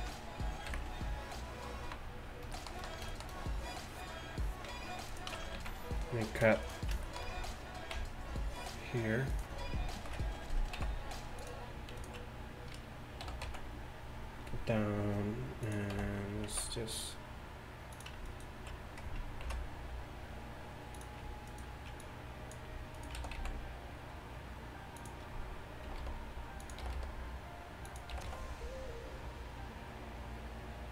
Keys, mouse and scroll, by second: 0.7 KP_1, 5.4 Tab, 5.6 z, 8.0 v, 10.0 ctrl+l, 10.8 x, 13.4 e, 16.0 s, 18.3-20.3 right drag, 19.5 ctrl+b, 21.5-25.0 right drag, 22.1-25.0 drag, 23.2 s, 25.9 g, 26.9 g, 28.2 g.